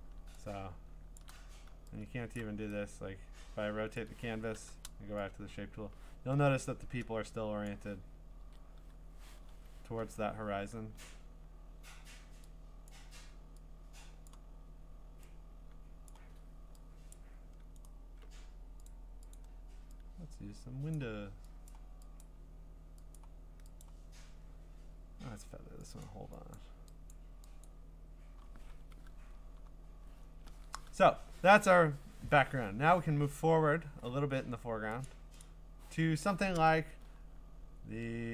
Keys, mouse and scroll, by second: 0.7-1.3 scroll, 1.2 click, 1.4-2.4 typing, 2.4 click, 4.0 click, 4.5 u, 7.7 click, 8.4 ctrl+z, 9.5 Escape, 12.9 click, 14.3 click, 16.1 click, 19.4 right click, 19.4 click, 20.9 click, 21.7 click, 22.2 click, 23.2 click, 23.8 click, 26.0 click, 26.6 click, 27.1 click, 27.7 click, 29.4 scroll up 5, 29.9-31.5 scroll down 8, 33.2 scroll up 3, 33.7-34.3 scroll down 4, 34.3-35.1 scroll up 3, 35.1 click, 35.4 click, 37.1 scroll up 7, 37.4 scroll down 4, 37.5-37.9 scroll.